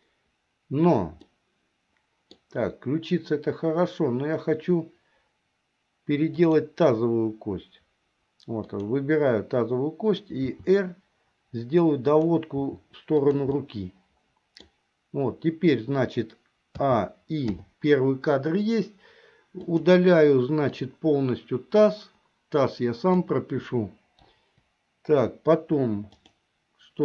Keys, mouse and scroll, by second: 1.3-2.6 middle drag, 6.4 click, 8.6 click, 10.4 r, 12.8 r, 13.8 middle click, 17.0 a, 17.8 i, 19.7 click, 20.9-23.3 drag, 24.4 Delete, 26.2 click, 26.2 BackSpace.